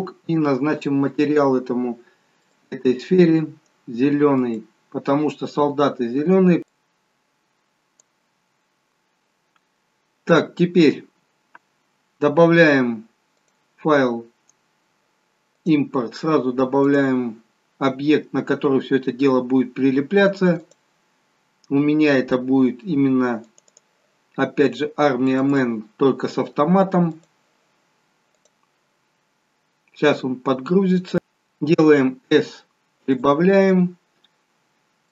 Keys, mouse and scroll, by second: 1.1 click, 5.7 click, 13.5 click, 19.0-19.6 scroll down 2, 34.3-34.9 scroll up 5.